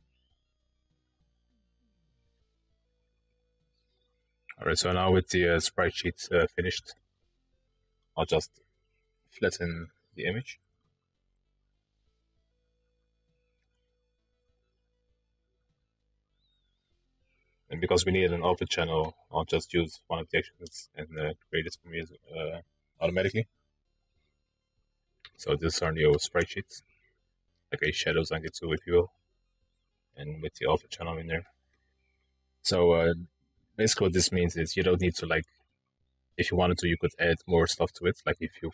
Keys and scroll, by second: 11.7 ctrl+e, 14.7 ctrl+e.